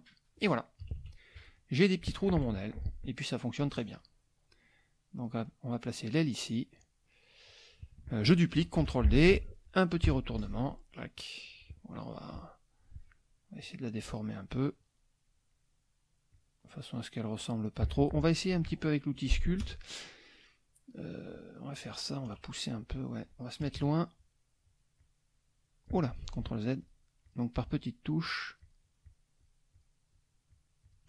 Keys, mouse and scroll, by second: 0.8 KP_Subtract, 1.6 middle click, 2.5 F1, 2.7 middle click, 3.6-5.4 drag, 6.5 middle click, 8.8 ctrl+d, 10.0 h, 10.4-11.7 drag, 11.9 click, 13.6 click, 16.3-17.7 drag, 19.6 KP_Add, 20.2 click, 22.3 KP_Subtract, 23.6 KP_Subtract, 25.0 click, 26.2 ctrl+z, 26.8 ctrl+click, 27.3 ctrl+click, 27.8 ctrl+click, 28.2 click, 29.1 click, 29.7 click, 30.1 click, 30.5 click, 30.8 click.